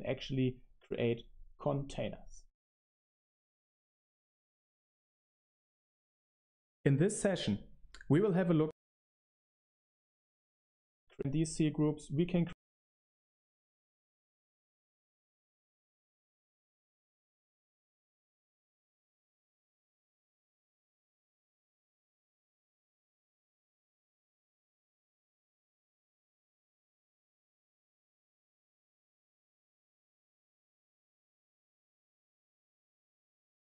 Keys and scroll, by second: 8.6 BackSpace, 10.9 BackSpace, 11.1 BackSpace, 14.6-19.3 typing.